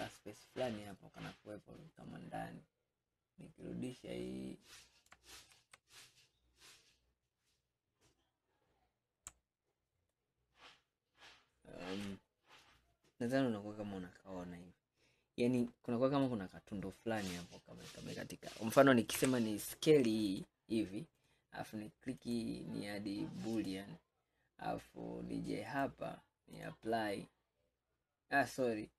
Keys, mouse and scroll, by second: 0.2-1.0 scroll up 1, 1.0-4.0 middle drag, 5.6 ctrl+z, 9.5 scroll down 2, 10.1 scroll up 1, 10.3-13.3 middle drag, 16.3-19.2 middle drag, 19.2 s, 21.2 click, 23.7-25.4 drag, 25.7-28.8 drag.